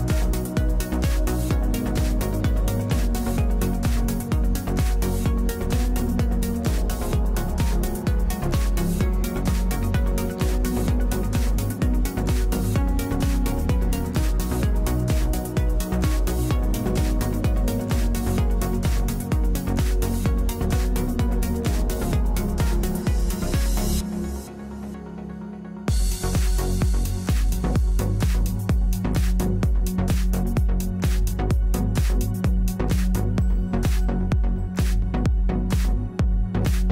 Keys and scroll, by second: 2.0 ctrl+z, 9.7 ctrl+z.